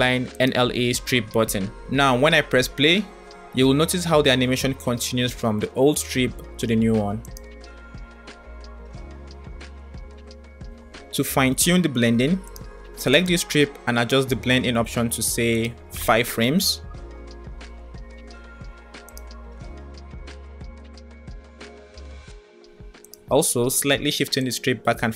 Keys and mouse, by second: 2.3 click, 2.8 space, 6.9 click, 7.5 space, 7.8 space, 10.5 space, 13.3 click, 14.8-16.8 drag, 19.1 click, 19.5 space, 23.5-24.8 drag.